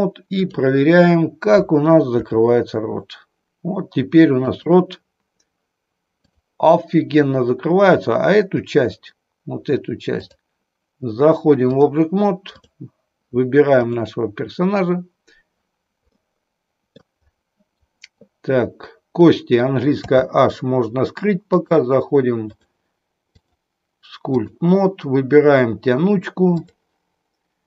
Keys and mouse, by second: 2.2 r, 4.5 click, 6.2 click, 10.0-11.8 drag, 12.5 click, 13.7 click, 16.0-17.0 middle drag, 19.2 click, 20.0 h, 21.4 click, 22.4 click, 23.3-24.7 drag.